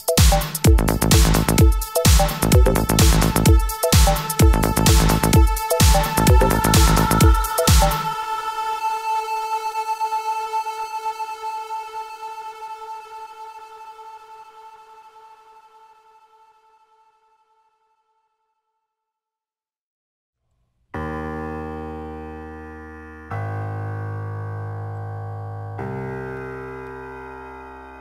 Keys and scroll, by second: 25.4 ctrl+t.